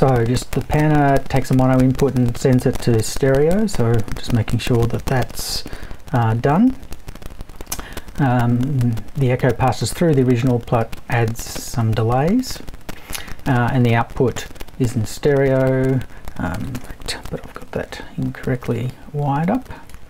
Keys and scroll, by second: 17.2 BackSpace.